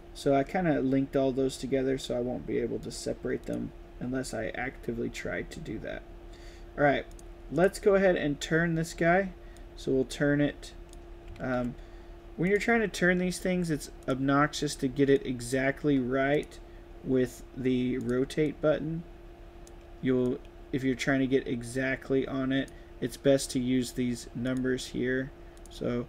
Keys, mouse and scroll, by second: 2.7 click, 3.3 click, 7.0 click, 7.4 click, 9.4-10.8 drag, 12.3 click, 13.9 click, 15.0-15.4 drag, 17.9 click, 18.3 click, 19.0-19.5 drag, 20.1-22.6 drag, 24.3 click, 25.5 click.